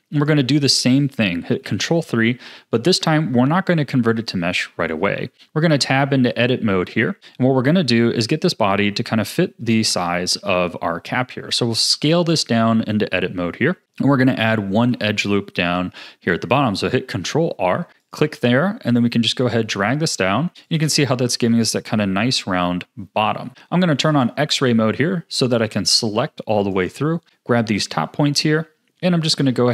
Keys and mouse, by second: 1.6 ctrl+3, 2.6 shift+drag, 2.7 shift+middle click, 5.3 Tab, 13.8 s, 13.8 a, 14.7 ctrl+r, 26.0 click, 28.3 s.